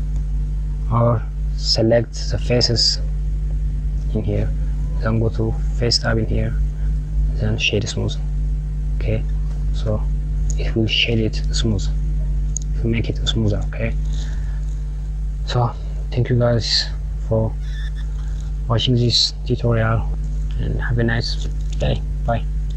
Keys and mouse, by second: 3.3 click, 5.4-7.9 drag, 9.5 Tab, 10.4 KP_Add, 11.9 click, 12.8 click, 16.4 ctrl+z, 16.7 ctrl+z, 18.0 Tab, 19.1 click.